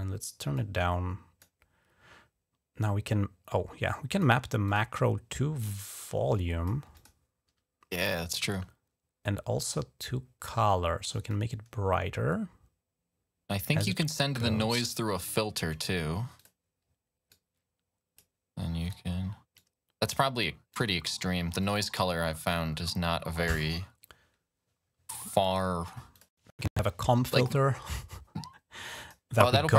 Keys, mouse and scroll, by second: 0.4 click, 3.8 click, 4.5 click, 5.5 click, 6.8 click, 11.1-13.6 drag, 13.7 click, 15.0 click, 15.5 click, 16.2 click, 17.1 click, 18.7 click, 19.4 click, 20.6 click, 21.5 click, 26.0 click, 27.1-28.9 drag, 29.2 click.